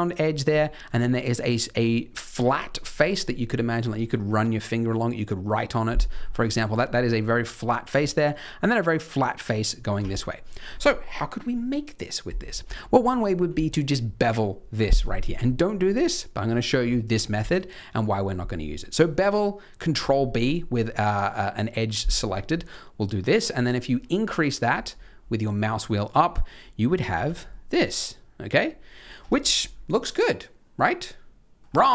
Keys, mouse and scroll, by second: 10.5-12.8 scroll down 1, 12.8-13.6 scroll down 1, 13.6-16.7 scroll up 2, 17.3 ctrl+b, 26.4 middle click, 27.1 z, 27.4 middle click, 29.1 Tab, 29.4-30.4 scroll down 6, 30.8 middle click, 31.6-31.9 scroll up 1.